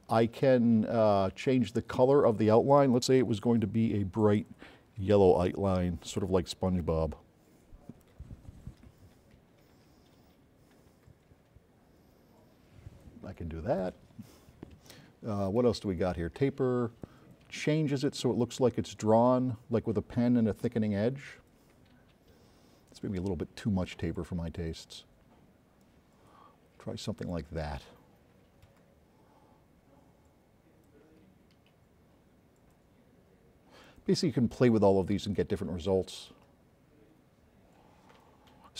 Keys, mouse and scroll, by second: 1.8 click, 3.7-4.4 drag, 4.7-5.4 drag, 15.6 click, 17.9 click, 23.1 click, 26.0 click, 34.0 click.